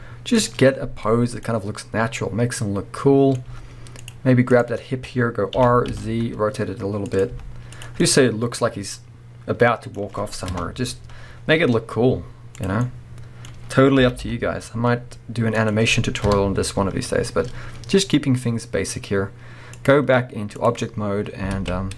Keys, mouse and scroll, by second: 0.7-1.4 scroll down 1, 1.4-4.5 middle drag, 3.5 z, 4.5 click, 5.6 r, 7.2 click, 7.3 z, 8.0-12.6 middle drag, 10.5 KP_0, 11.4-12.0 scroll down 2, 12.0-12.6 scroll up 2, 12.6 click, 12.8-14.4 middle drag, 13.5-14.0 scroll up 2, 14.0 g, 15.7 click, 16.2 KP_0, 19.8-21.9 drag, 21.0-21.6 scroll down 1, 21.6 alt+a, 21.8-21.9 scroll up 1.